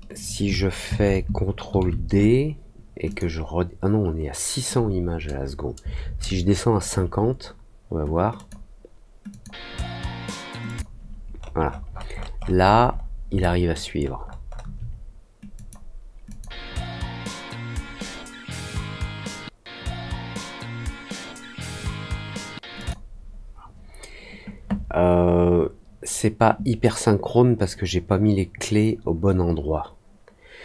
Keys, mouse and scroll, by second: 3.0 click, 8.3 click, 9.2 click, 10.6 click, 11.3-13.1 scroll up 7, 13.3 alt+middle click, 13.9-14.6 alt+scroll up 3, 15.5 click, 16.2 click, 22.7 click.